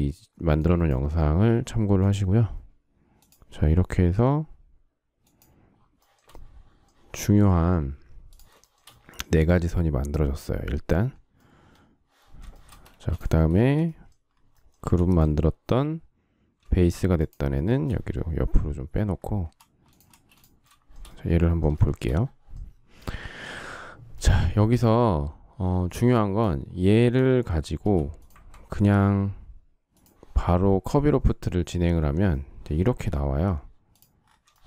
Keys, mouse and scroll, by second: 1.9 shift+click, 3.1 shift+click, 3.4-4.7 shift+scroll, 5.1 shift+click, 5.6 shift+scroll, 5.9 shift+middle click, 8.6 shift+double middle click, 12.4 shift+middle click, 12.8 space, 13.5 shift+middle click, 14.7 m, 17.1 shift+click, 17.4 shift+middle click, 17.6 shift+double middle click, 17.7 shift+middle click, 20.0 space, 21.6 shift+middle click, 26.7 shift+middle click, 27.7 m, 30.4 space, 34.4 shift+middle click.